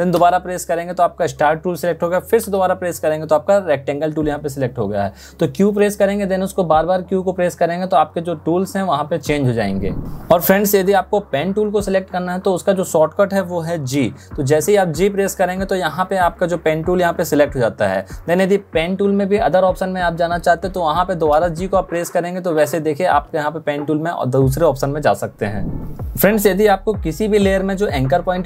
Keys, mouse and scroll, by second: 0.1 q, 2.5 q, 13.6 g, 21.4 g.